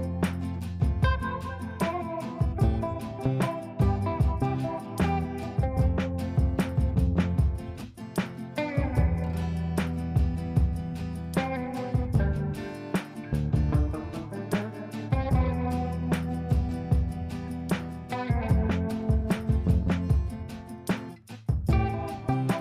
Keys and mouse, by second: 5.4 click, 8.2 click, 12.5 space, 13.8 g, 14.8-18.1 drag.